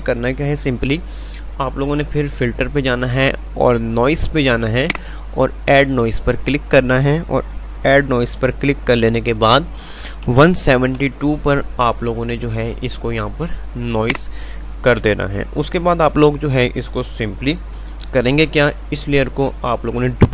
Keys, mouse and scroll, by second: 2.4 click, 14.1 click.